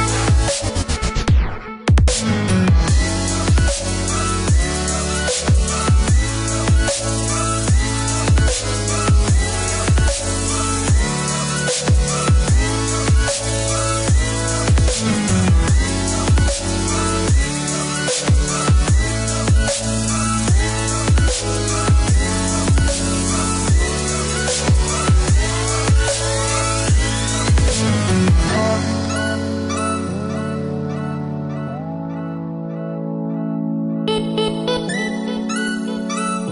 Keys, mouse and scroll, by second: 2.1 click, 3.1 Escape, 5.2 click, 6.9 click, 8.0 click, 8.6 click, 9.4 KP_9, 9.6 KP_5, 10.0 KP_Enter, 10.6 Escape, 13.2 click, 14.2 click, 15.4 click, 15.9 KP_4, 16.2 KP_0, 16.5 Return, 18.0 Escape, 19.1 Escape, 20.7 click, 21.8 click, 23.3 click, 24.8 click, 25.9 click, 26.9 click, 27.5 click, 30.7 click, 33.0 click, 34.8 click, 35.4 click.